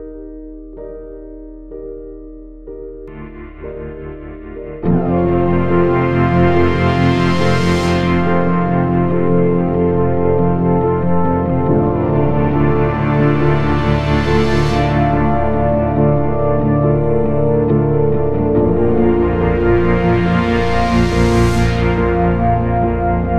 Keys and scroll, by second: 8.9 ctrl+d, 9.0 Escape, 15.4 3, 22.0 Escape, 22.2 ctrl+z.